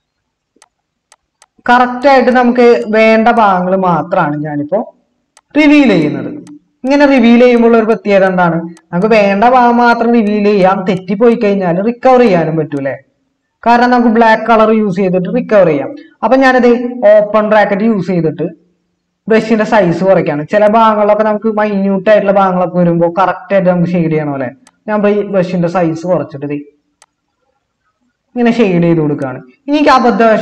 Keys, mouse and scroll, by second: 17.3-18.9 typing.